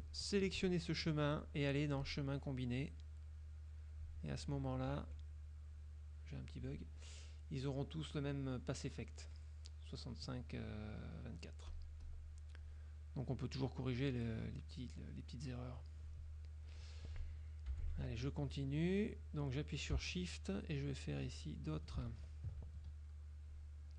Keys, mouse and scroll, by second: 0.2 shift+click, 2.1-4.0 drag, 5.1 F2, 5.9 click, 11.8 click, 12.3 click, 12.7 click, 13.4 click, 14.5 click, 17.8 F6, 21.3 shift+click, 22.3 ctrl+shift+z, 23.0 ctrl+shift+click, 23.7 shift+click.